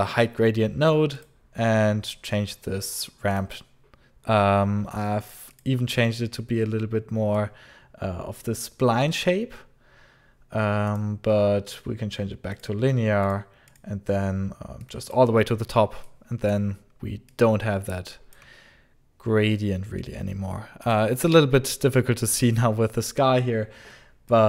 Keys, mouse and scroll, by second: 1.0 click, 3.2 click, 5.4 click, 7.2 click, 10.7 click, 11.5 click, 12.4 click, 13.1 click, 13.6 click, 14.7 click, 15.9 click, 16.8 scroll down 1, 17.2 alt+click, 17.5 alt+click, 17.5 alt+click, 17.5 alt+click, 17.6 alt+click, 17.6 alt+click, 17.6 alt+click, 20.7 alt+click, 24.2 click.